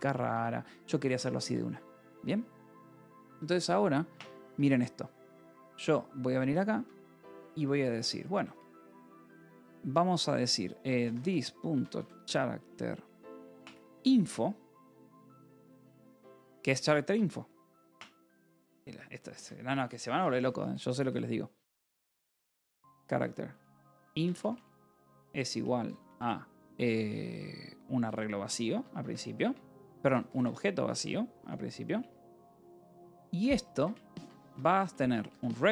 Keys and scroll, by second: 1.3 Escape, 1.7 j, 2.7 a, 3.4 Tab, 4.4 Escape, 4.6-8.2 typing, 6.6 Escape, 9.1 Return, 10.5-14.4 typing, 15.7 Escape, 15.9 k, 16.9 a, 17.8 Tab, 19.2 Escape, 19.8 k, 21.1-26.1 typing, 27.8-35.7 typing, 28.3 Escape.